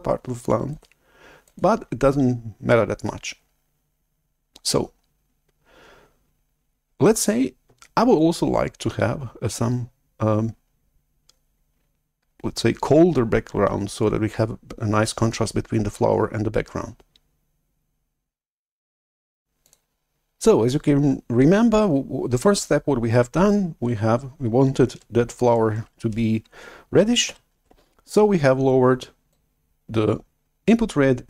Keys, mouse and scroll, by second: 0.7 click, 1.4 click, 1.9-3.5 drag, 19.5-22.1 drag, 27.3 shift+super+F11, 29.2-31.2 drag.